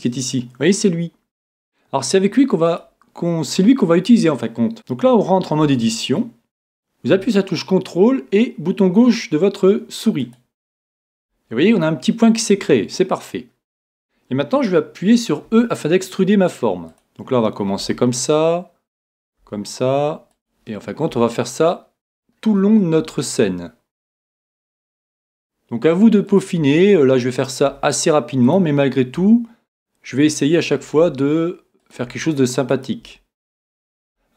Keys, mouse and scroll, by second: 2.8 click, 15.5 e, 17.8 e, 19.1-23.9 drag, 19.4 e, 21.1 e, 23.0 e, 24.8-30.3 drag, 25.0 e, 26.6 e, 27.7 e, 29.1 e, 30.6-34.3 drag, 31.0 e, 34.0 e.